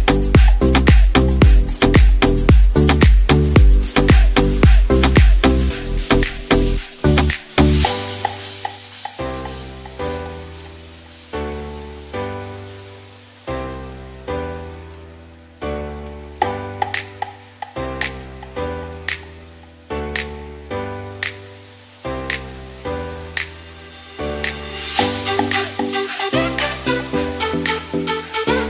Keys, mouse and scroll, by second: 1.1 ctrl+z, 1.3 ctrl+z, 1.5 ctrl+z, 1.7 ctrl+z, 1.9 ctrl+z, 2.4 ctrl+z, 3.6 ctrl+z, 3.9 ctrl+z, 4.2 ctrl+z, 5.8 e, 6.0 x, 7.7 shift+a, 9.1-13.7 typing, 15.0-16.3 typing, 19.4 click, 21.6 ctrl+r, 22.6 g, 23.9 ctrl+r, 25.0 ctrl+r.